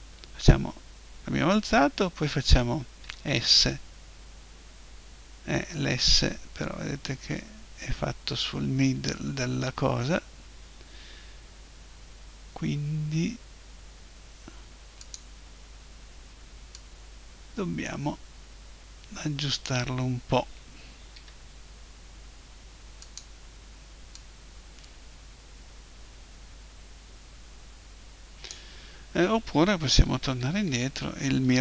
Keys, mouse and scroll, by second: 3.0 s, 15.1-18.5 drag, 21.2 s, 23.2-26.1 drag, 30.1 ctrl+z, 30.4 ctrl+z, 30.7 ctrl+z, 31.0 ctrl+z, 31.4 ctrl+z.